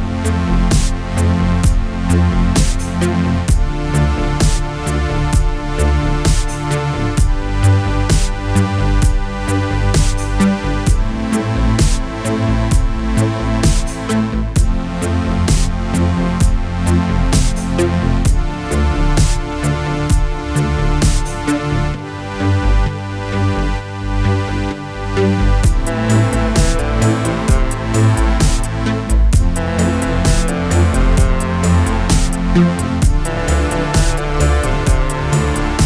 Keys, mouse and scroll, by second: 2.5-3.5 drag, 3.5 middle click, 4.0 click, 5.6-6.7 middle drag, 6.7 Tab, 7.0 middle click, 7.9 alt+a, 8.5-9.9 middle drag, 9.9-13.1 drag, 13.6-14.7 drag, 14.7-20.2 middle drag, 22.8-24.4 middle drag, 24.4-24.9 scroll up 1, 24.9-28.0 middle drag, 28.0-29.9 drag, 29.9 scroll up 1, 30.0-31.1 middle drag, 31.1-31.9 drag, 31.9-32.3 scroll up 1, 32.3-33.0 middle drag, 33.0-33.5 scroll up 1, 33.5 scroll down 1, 33.7-35.1 middle drag, 35.1 scroll down 2, 35.3-35.8 middle drag.